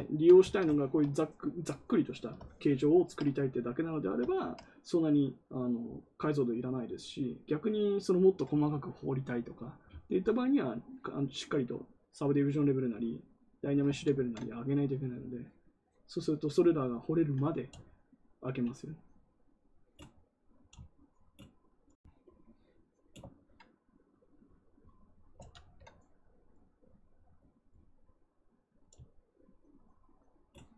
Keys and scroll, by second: 13.9 ctrl+z, 14.1 ctrl+z, 25.3 ctrl+z, 25.5 ctrl+z.